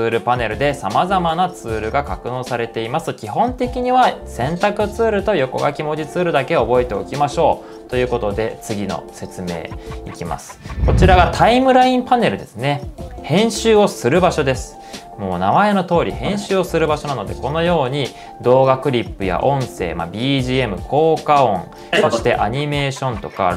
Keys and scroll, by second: 12.4 shift+super+z.